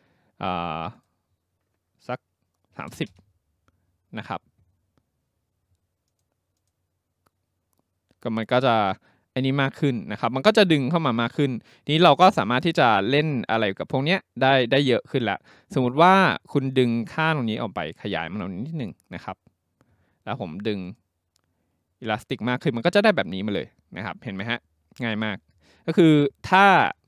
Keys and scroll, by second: 2.5-3.4 typing.